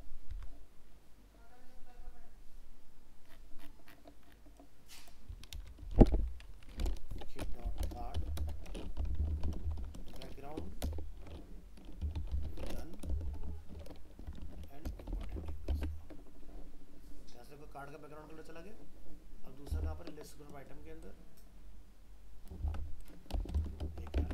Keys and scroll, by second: 0.3 ctrl+c, 5.8 ctrl+v, 15.3 ctrl+s, 15.7 alt+Tab, 19.7 alt+Tab, 22.6 ctrl+c, 23.6 ctrl+v, 24.2 alt+Tab.